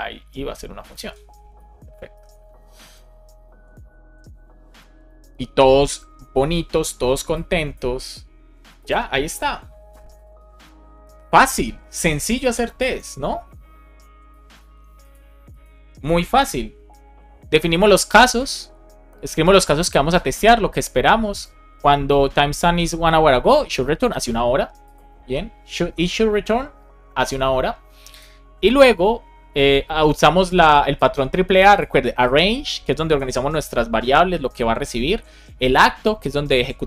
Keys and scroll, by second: 0.4 shift+9, 0.9 super+s, 2.1 alt+shift+f, 2.4 super+s, 16.3 super+b.